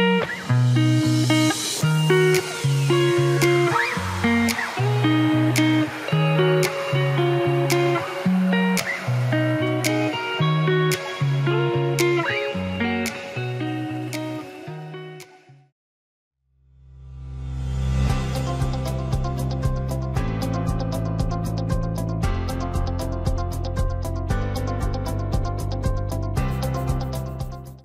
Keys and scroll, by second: 2.4 ctrl+t.